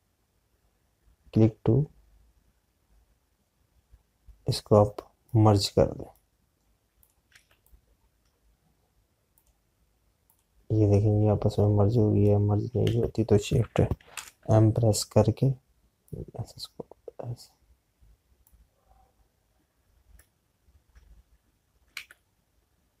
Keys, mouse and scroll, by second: 6.1 click, 8.1 z, 8.6 click, 13.9 ctrl+z, 15.0 m, 16.9 click, 22.8 ctrl+z.